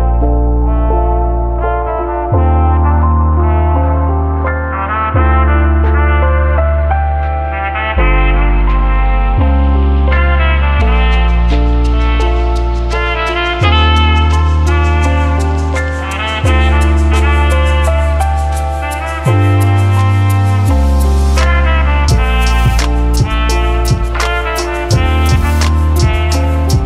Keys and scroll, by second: 15.6 ctrl+d, 20.6-23.0 typing, 25.3 ctrl+d.